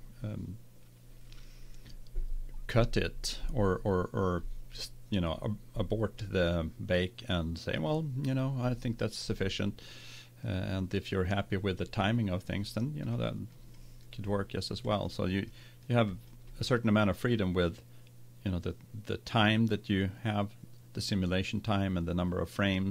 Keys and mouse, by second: 10.5-12.4 drag, 13.1-14.2 middle drag, 14.3-17.9 middle drag.